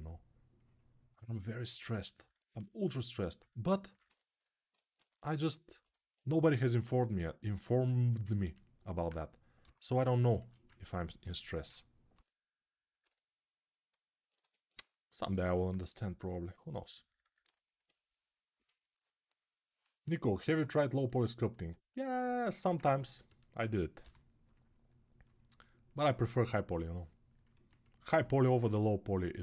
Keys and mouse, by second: 9.4 g, 11.9 g, 14.0-22.5 right drag, 14.2 1, 23.8 g, 28.3-29.4 right drag.